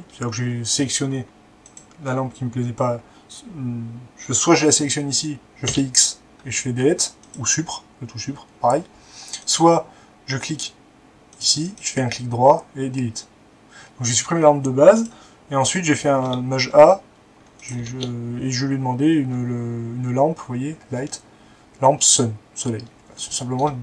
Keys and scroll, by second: 5.7 x, 16.0 a, 18.2 typing.